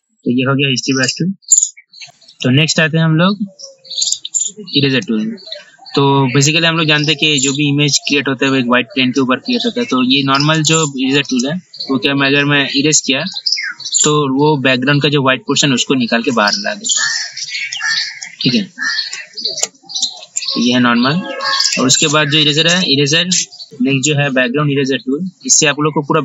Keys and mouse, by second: 2.0 ctrl+alt+e, 2.5 click, 4.2 right click, 5.1 click, 10.8 right click, 11.3-17.9 drag, 19.4 ctrl+z, 19.8 ctrl+z, 20.2 ctrl+z, 21.9 right click.